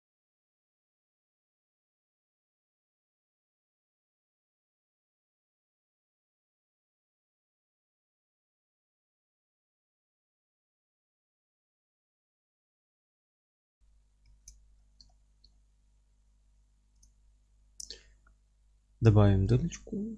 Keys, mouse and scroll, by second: 0.2 o, 7.6 click, 7.7 scroll down 1, 7.9 Tab, 8.1-9.3 alt+middle drag, 8.5-9.1 scroll down 2, 9.3 click, 9.5-9.9 scroll up 1, 9.9 shift+right click, 10.2 middle click, 10.3-10.7 scroll down 1, 10.7 click, 10.9-17.0 alt+middle drag, 11.7 scroll up 1, 12.0 scroll down 1, 14.2 alt+h, 17.0 click, 17.3-19.7 scroll up 1.